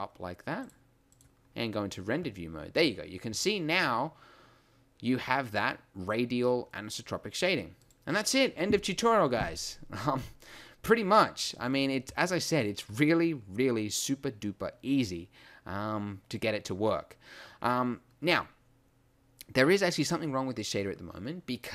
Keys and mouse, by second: 5.4-6.7 middle drag, 6.7 click, 6.9 click, 7.4 click.